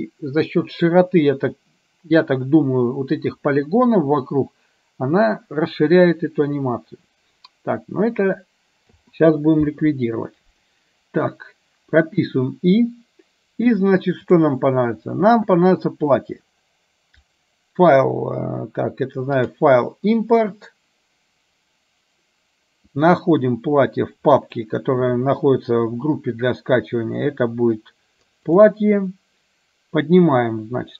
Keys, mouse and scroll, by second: 9.6 i, 13.8 click, 17.5-18.6 drag, 19.6-25.0 drag.